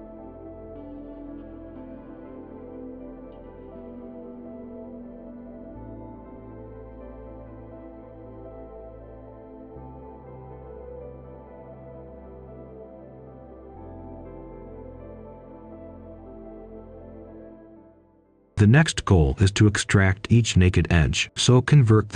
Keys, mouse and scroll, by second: 0.6 click, 2.3 ctrl+right click, 3.2-16.3 drag, 16.4 ctrl+right click, 17.1 shift+right click, 17.9 click, 18.4-19.5 typing, 20.0-22.1 drag.